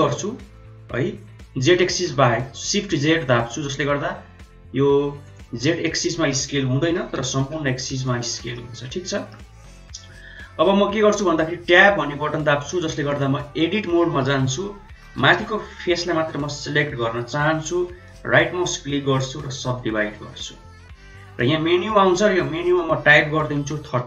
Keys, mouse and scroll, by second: 5.8-6.2 middle drag, 6.7 s, 8.4 middle click, 11.3 Tab, 13.0 click, 15.1 3, 15.3 click, 21.7 click, 22.5-24.0 drag.